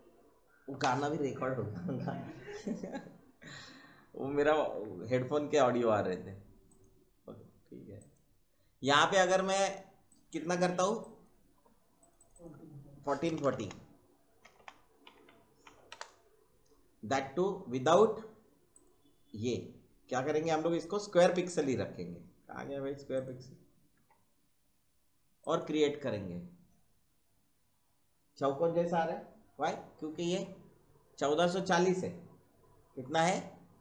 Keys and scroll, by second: 13.2 BackSpace, 14.7-15.8 typing.